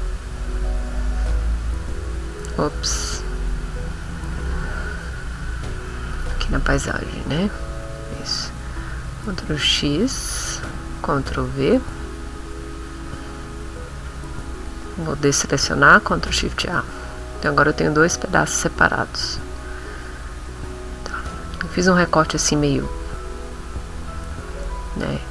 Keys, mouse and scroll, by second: 0.9 click, 1.4 click, 3.4 ctrl+z, 4.3 ctrl+z, 6.1 click, 7.4 click, 7.8 click, 9.1 ctrl+x, 11.0 ctrl+v, 15.7 ctrl+shift+a, 16.7 middle click, 18.1 click, 18.6 click, 19.4 click, 19.9 click, 21.5 click, 22.0 click, 24.5 click.